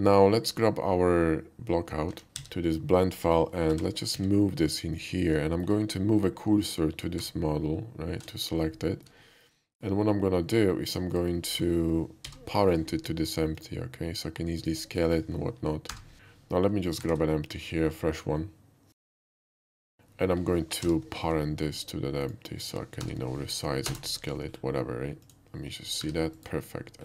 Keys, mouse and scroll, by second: 2.2 a, 2.4 ctrl+v, 3.8 g, 4.1 x, 4.3 g, 5.0 click, 5.5 middle drag, 7.2 shift+s, 7.9 shift+s, 8.1 shift+s, 8.5 scroll up 1, 8.7-9.1 middle drag, 9.3 shift+middle click, 9.6 shift+middle click, 10.1 i, 11.1 click, 12.3 ctrl+i, 13.5 shift+click, 14.6 shift+click, 15.9 ctrl+p, 16.1 h, 17.0 shift+a, 19.1 click, 19.5 s, 19.8 drag, 20.9 ctrl+i, 21.5 ctrl+shift+i, 22.3 shift+click, 23.1 ctrl+p, 23.9 Return, 25.3 click, 26.0 g, 26.4 right click, 26.7 /.